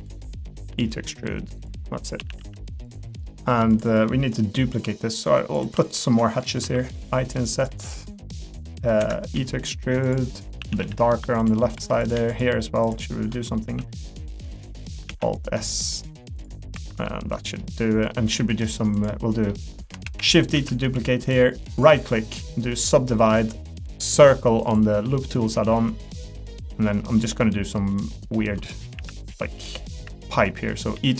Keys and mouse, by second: 0.7 e, 2.2 a, 2.4 g, 3.1 middle click, 4.4 middle click, 5.9 shift+click, 7.9 s, 9.3 e, 10.6 a, 10.8 g, 11.7 3, 12.3 shift+click, 13.6 i, 15.1 alt+s, 16.7 3, 17.0 middle click, 17.6 middle click, 18.4 middle click, 19.5 middle click, 20.0 shift+d, 20.5 s, 23.1 middle click, 25.0 middle click, 25.6 s, 26.4 middle click, 27.7 click, 28.9-31.1 typing.